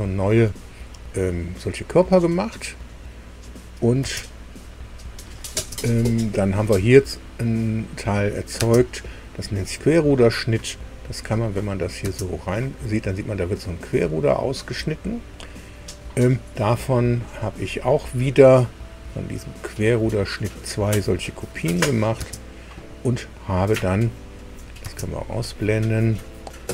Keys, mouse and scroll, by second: 2.8 click, 4.0 space, 4.6 click, 5.5 space, 8.1 click, 8.6 space, 11.6 click, 12.0 space, 13.0-13.4 scroll down 2, 13.4-15.0 middle drag, 21.7 click, 22.1 space, 24.4 click, 24.8 space.